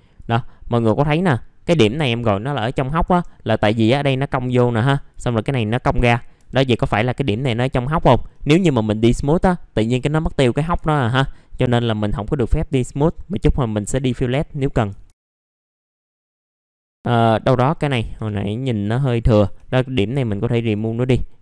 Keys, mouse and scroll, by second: 0.4-0.9 scroll up 1, 0.9 click, 3.0 2, 3.5 click, 4.9 ctrl+click, 6.0-6.3 scroll up 1, 7.0 click, 8.3 right click, 9.1 click, 13.9-14.9 drag, 15.1 middle click, 15.2 scroll down 1, 15.3 middle click, 15.4 scroll up 1, 15.5 right click, 15.8 click, 18.1 BackSpace, 19.4 Delete, 20.1 click, 20.8 right click.